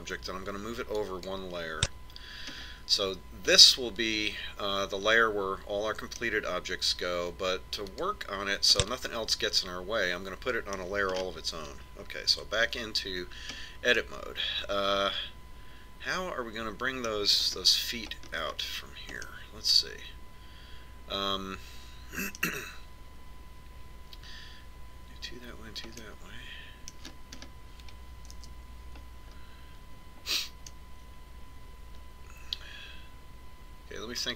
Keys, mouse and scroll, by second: 3.3-6.2 middle drag, 8.7 click, 9.6-11.3 middle drag, 12.0-16.6 middle drag, 13.2 Tab, 18.3-19.0 scroll up 1, 19.0-20.1 scroll up 1, 20.1-22.1 middle drag, 26.9-28.3 middle drag, 29.2 KP_1, 29.4 KP_1, 32.5-33.5 middle drag.